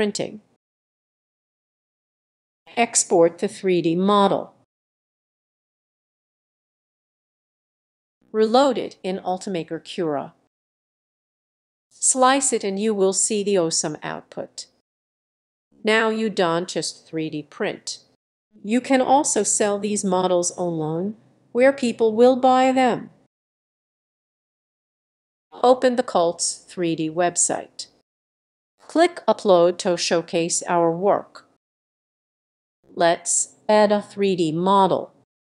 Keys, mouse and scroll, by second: 3.6 ctrl+s.